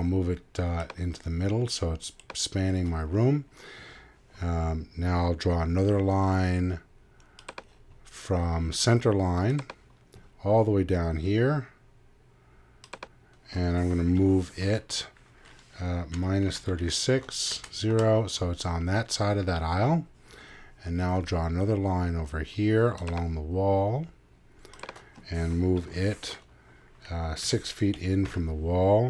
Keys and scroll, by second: 16.1 -, 16.4 3, 27.4 6.